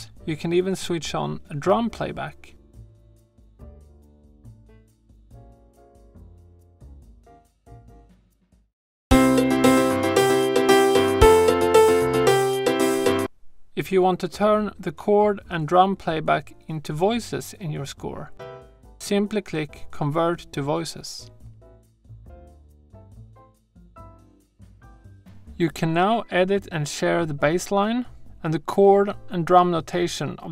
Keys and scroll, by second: 8.6 space, 13.0 space.